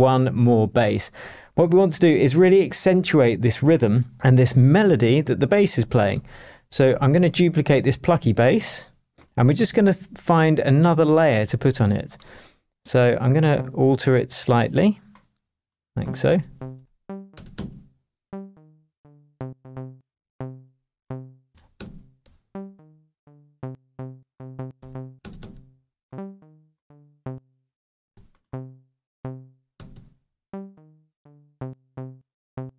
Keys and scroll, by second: 6.8 super+d, 11.4 BackSpace, 16.3 space, 16.7 BackSpace, 17.3 space, 20.0 space, 20.6 BackSpace, 21.7 space, 24.7 BackSpace, 25.2 space, 28.0 space, 29.5 BackSpace, 29.7 space.